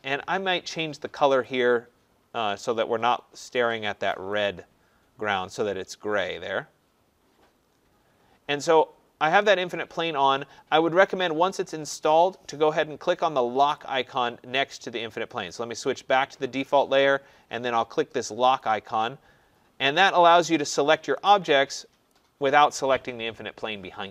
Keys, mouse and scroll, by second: 1.4 click, 3.6 click, 4.5 click, 5.3 middle click, 6.0 middle click, 6.8 middle click, 13.7 click, 15.5 click, 18.6 click, 20.3 click, 21.2 click, 22.1 click.